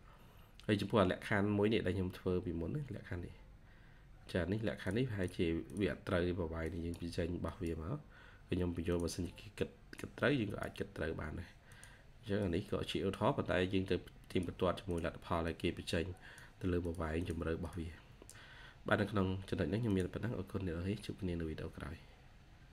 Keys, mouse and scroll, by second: 0.0 scroll down 1, 3.2 scroll up 1, 5.1 double click, 8.0-8.7 scroll down 1, 17.0 double click, 17.9 scroll down 1, 18.9-20.1 scroll up 1, 20.9-22.2 scroll down 1.